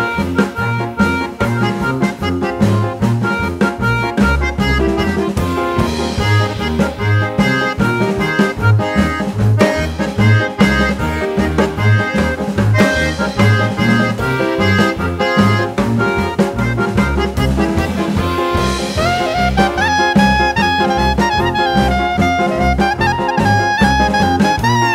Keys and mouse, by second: 0.8 click, 0.8-3.3 drag, 6.2 click, 7.3-8.9 drag, 16.4 click, 22.5 6.